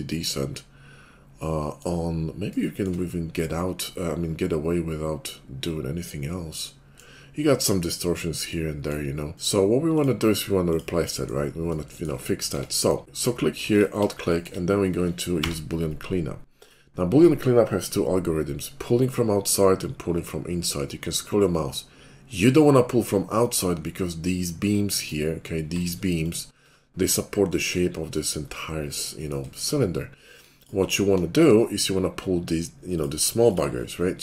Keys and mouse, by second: 12.5 Tab, 13.0 middle click, 13.7 alt+click, 13.8 alt+middle click, 14.2-16.7 shift+drag, 15.2 y, 16.7-25.7 middle drag, 25.7 alt+click, 26.5-34.2 middle drag.